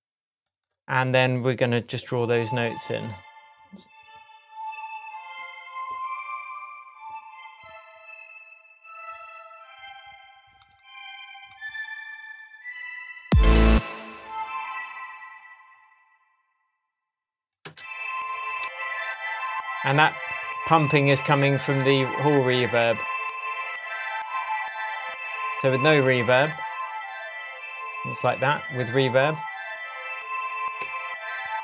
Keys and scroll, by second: 13.2 space, 17.6 space, 18.6 shift+Tab, 21.3 Tab, 30.8 Tab.